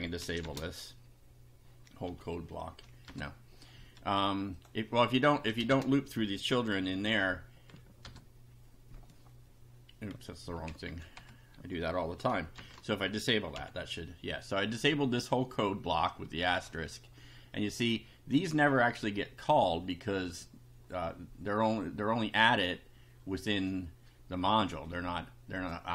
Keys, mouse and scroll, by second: 0.5 shift+1, 2.0 F5, 3.0 BackSpace, 4.6 click, 5.3 Left, 5.7 shift+1, 6.9 F5, 8.0 BackSpace, 10.6 Up, 11.1 Home, 12.6 shift+8, 13.6 F5, 16.1 click, 25.6 click.